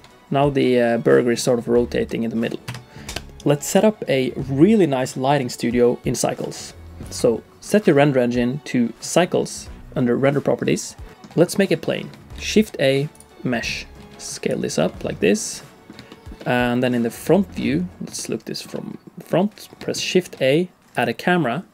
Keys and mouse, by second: 11.1 shift+middle click, 11.8 middle click, 12.3 shift+a, 13.7 s, 14.1 s, 14.9-15.9 drag, 16.1 shift+middle click, 16.4 middle click, 17.3 shift+middle click, 17.6 middle click, 18.2 shift+click, 18.4 shift+middle click, 18.7 middle click, 19.9 shift+a.